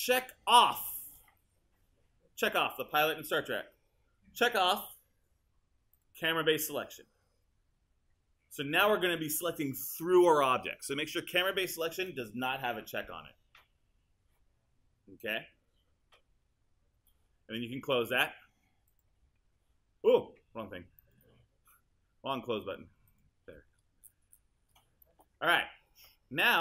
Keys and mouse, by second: 21.2 click.